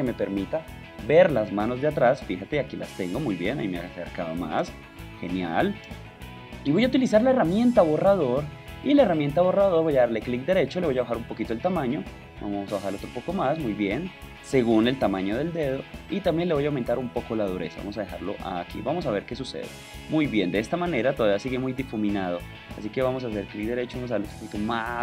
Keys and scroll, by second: 23.0 super+z.